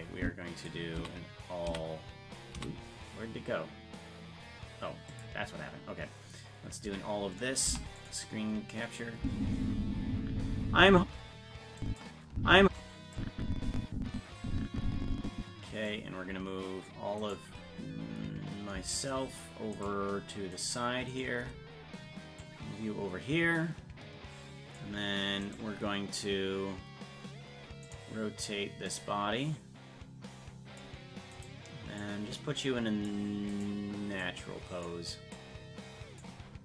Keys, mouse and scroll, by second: 0.9 a, 5.1 click, 6.8 a, 7.6 i, 9.2 space, 11.8 click, 12.3 space, 13.1-15.8 drag, 17.3 right click, 19.0-21.4 shift+right drag, 22.4-24.7 drag, 25.5 right click, 27.8 click, 28.8-31.4 drag, 31.4 right click, 32.0-33.1 drag, 33.6 right click, 34.2 click, 35.3-36.3 drag.